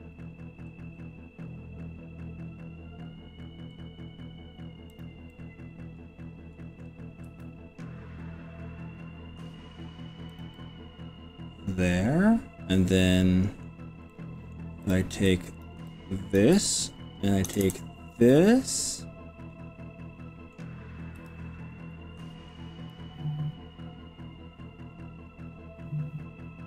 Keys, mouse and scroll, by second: 0.7 scroll down 1, 1.1-1.7 scroll up 5, 3.5 scroll up 1, 4.1 scroll down 1, 4.6 scroll up 1, 5.0 click, 5.3-6.8 middle drag, 7.3 g, 10.4 click, 10.5-13.6 middle drag, 14.1 middle click, 14.9 click, 15.4 click, 16.0 click, 17.6 ctrl+KP_Add, 17.6 ctrl+KP_Add, 19.0-20.6 middle drag, 21.2 g, 22.0 scroll up 2, 22.2-23.2 scroll down 6, 23.8 scroll down 1.